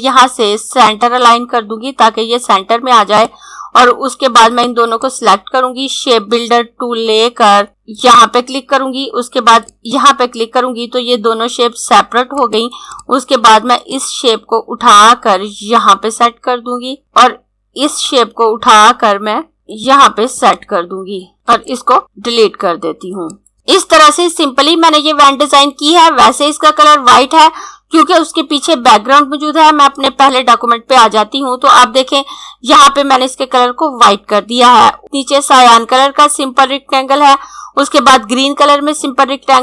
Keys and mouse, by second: 7.7 click, 21.6 click, 22.1 Delete, 23.2 click, 30.0 click.